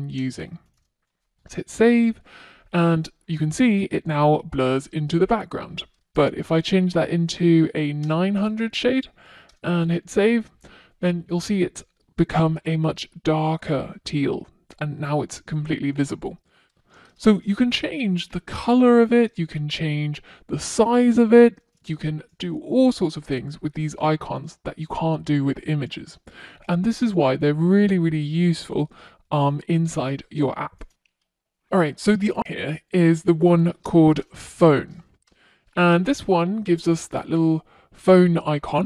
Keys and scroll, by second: 4.6 Return, 6.0 Return, 6.1 super+s, 16.9 Return, 20.9 Return, 21.0 super+s, 33.4 Return, 34.0 Return, 34.1 super+s.